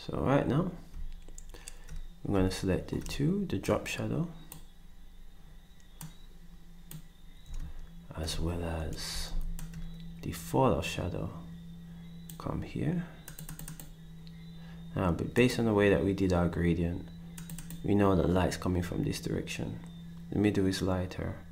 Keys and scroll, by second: 9.3 ctrl+shift+d.